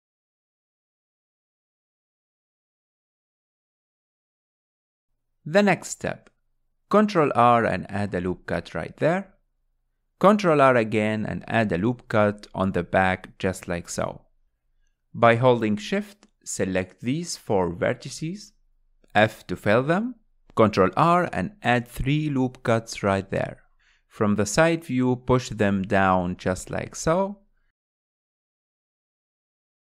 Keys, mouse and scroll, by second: 0.0 scroll up 3, 0.3 shift+middle click, 0.9 click, 1.4 Tab, 1.8-2.8 middle drag, 2.8 click, 3.2-4.3 middle drag, 4.3 scroll down 2, 4.6-6.3 shift+middle drag, 6.3 ctrl+r, 9.9-11.7 middle drag, 11.7 ctrl+r, 13.4-15.7 middle drag, 15.7-16.2 scroll up 4, 16.3 middle click, 17.0 click, 17.6 shift+click, 18.0 middle click, 19.1 shift+click, 20.5 f, 20.9 middle click, 21.6 ctrl+r, 25.6 KP_1, 27.2 click.